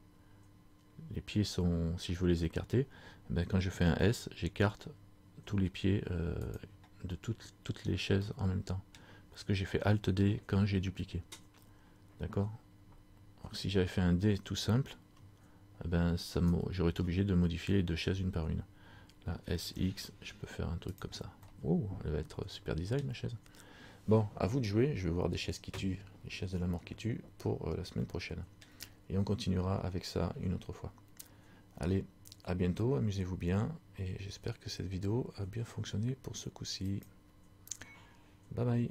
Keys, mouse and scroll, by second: 8.3 scroll up 1, 8.4 middle click, 10.7 scroll down 1, 11.5 scroll down 2, 16.4 alt+right click, 19.5 s, 21.5 middle click, 26.8-28.1 scroll down 1, 28.2 middle click.